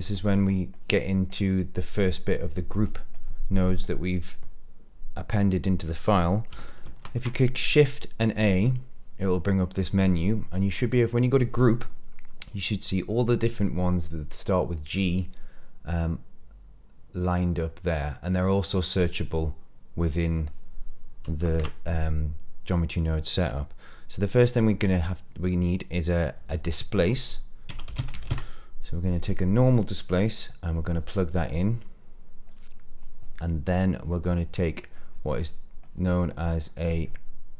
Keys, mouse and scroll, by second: 0.1 drag, 0.7 click, 1.4 middle click, 2.8 click, 3.1-3.6 drag, 3.7 click, 6.8 shift+a, 20.3 click, 21.4 shift+a, 31.4 middle click, 33.4 click, 34.0 middle click, 35.1 scroll down 1, 35.8-36.8 drag, 37.0 middle click.